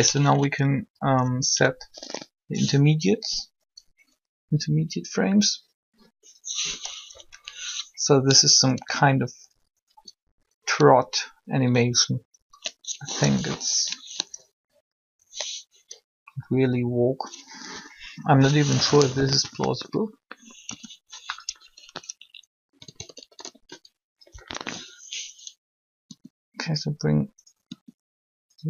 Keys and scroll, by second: 1.5 Up, 7.1 Up, 12.9 ctrl+3, 18.5 3, 20.6 i, 24.3 Up, 26.0 r, 27.6 r.